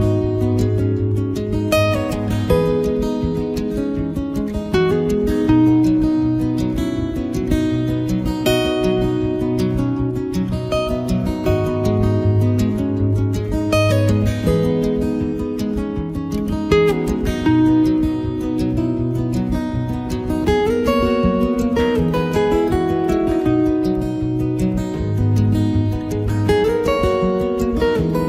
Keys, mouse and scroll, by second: 1.9 ctrl+right click, 2.0 right click, 2.2 click, 3.3 click, 4.3 ctrl+middle click, 5.2 click, 5.4 middle click, 5.6 middle click, 6.7 middle click, 7.0 shift+middle click, 7.2 shift+middle click, 7.3 middle click, 7.7 ctrl+middle click, 7.9 middle click, 9.2 ctrl+middle click, 9.4 ctrl+middle click, 10.1 click, 10.3 middle click, 10.6 ctrl+right click, 10.9 right click, 11.2 click, 11.6 ctrl+middle click, 11.6 middle click, 11.9 middle click, 12.2 click, 12.9 right click, 13.1 click, 13.2 ctrl+right click, 13.7 click, 14.7 f, 15.2 click, 16.8 click, 17.0 shift+b, 17.4 ctrl+middle click, 17.7 ctrl+middle click, 17.7 middle click, 18.7 right click, 18.8 ctrl+right click, 19.1 right click, 19.4 f, 19.7 click, 22.1 middle click, 22.5 middle click, 22.8 shift+middle click, 22.9 shift+middle click, 23.0 middle click, 23.5 click, 24.7 middle click, 25.0 ctrl+right click, 25.4 shift+right click, 25.9 click.